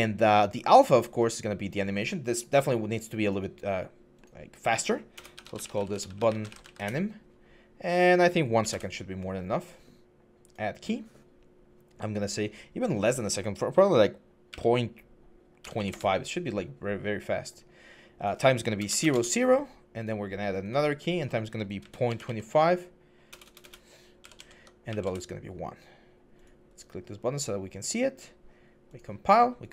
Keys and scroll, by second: 4.9-6.7 typing, 8.1-8.9 typing, 15.4 typing, 15.7 Return, 18.6 0, 18.7 Tab, 18.8 0, 18.9 Return, 21.0-22.1 typing, 23.1-25.2 typing, 26.9 1.